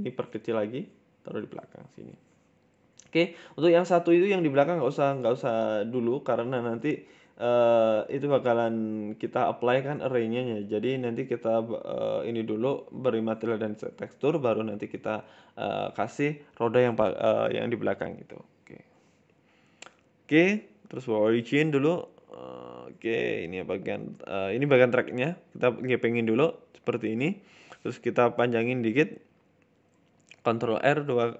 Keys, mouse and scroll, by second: 1.8 scroll down 3, 1.9 shift+middle click, 2.1 Tab, 2.3 scroll up 1, 2.3 scroll down 1, 2.4 middle click, 3.1 scroll down 1, 3.2 middle click, 3.7 scroll up 2, 3.8 middle click, 4.3-4.8 scroll up 1, 4.8 scroll up 1, 4.9 g, 6.2 middle click, 6.5 scroll down 2, 6.6 middle click, 7.0 KP_1, 7.3 scroll up 4, 7.5 shift+middle click, 8.1 shift+a, 9.1 scroll down 3, 9.3 shift+middle click, 9.6 middle click, 9.9-10.2 scroll down 2, 10.1 middle click, 10.2 shift+a, 10.9 shift+a, 12.5 KP_1, 13.1-13.9 scroll up 6, 13.2 shift+middle click, 13.7 shift+middle click, 13.9 s, 14.9 middle click, 15.3 ctrl+z, 15.8 ctrl+z, 16.0-16.5 scroll down 3, 16.3 middle click, 17.1 Tab, 17.5 a, 17.8 Tab, 18.0 middle click, 19.2 shift+s, 21.3 shift+a, 22.7 KP_1, 23.1 shift+middle click, 24.3 shift+middle click, 24.3 g, 24.5 s, 26.0 middle click, 26.5 shift+middle click, 26.7 scroll up 2, 27.1 KP_7, 27.8 s, 29.0 Tab, 29.9 Tab, 30.6 Tab, 30.6 ctrl+r.